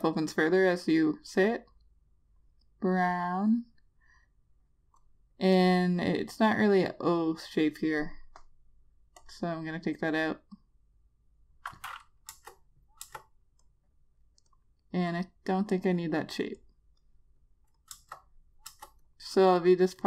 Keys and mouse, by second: 9.8 click, 13.6 Return, 14.2 click, 19.3 Return, 19.7 click.